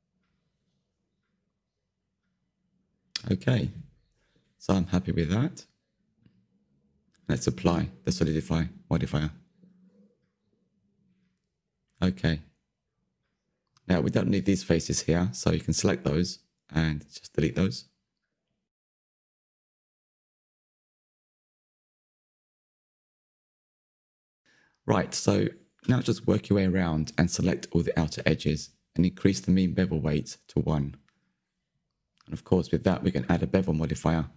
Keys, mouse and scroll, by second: 9.1-11.1 drag, 11.1 Tab, 11.5 middle click, 12.5 click, 12.7 Tab, 13.7 3, 13.9-15.4 middle drag, 15.4 click, 15.7-17.1 middle drag, 17.1 ctrl+click, 17.6-20.3 middle drag, 20.3 Delete, 20.8-23.4 middle drag, 22.7 Tab, 23.4-24.1 scroll up 3, 24.1 middle click, 24.7 2, 26.4-27.0 scroll down 3, 27.0-29.0 middle drag, 30.7-34.3 drag.